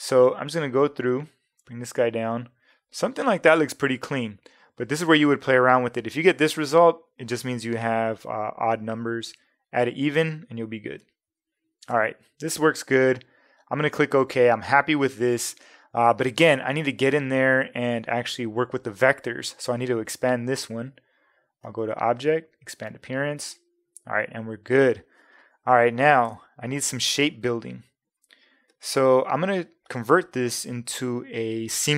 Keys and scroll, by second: 0.1 Down, 4.7 Up, 9.3 Up, 11.0 Down, 26.3 space.